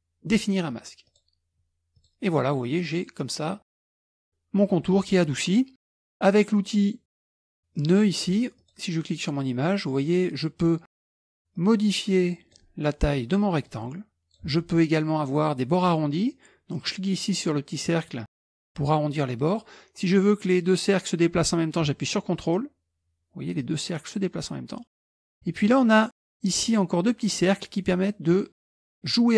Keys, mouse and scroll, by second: 1.1 click, 2.0 click, 7.8 click, 8.6 click, 11.6-12.8 drag, 13.7-14.8 drag, 16.8-20.0 drag, 22.4-25.4 ctrl+drag.